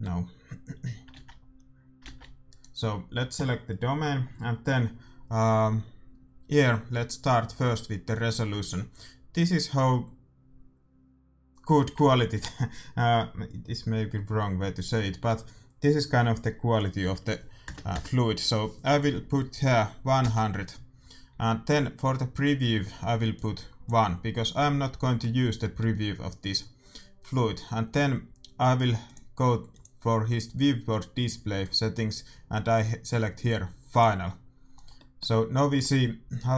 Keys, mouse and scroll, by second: 1.1 alt+a, 2.0 alt+a, 2.4-4.6 right drag, 8.5-13.7 drag, 23.3-24.9 drag, 24.9-27.2 middle drag, 29.0-30.8 drag, 32.0-33.8 drag, 34.7-36.5 middle drag.